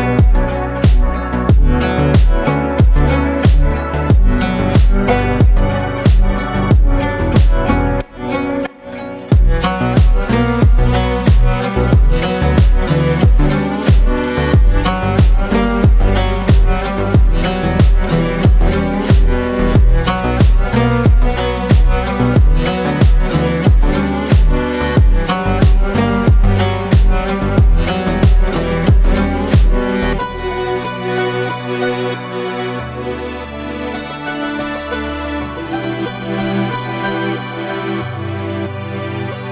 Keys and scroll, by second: 5.5 ctrl+r, 7.2 Escape, 12.5 Tab, 15.3 KP_1, 18.4 Delete.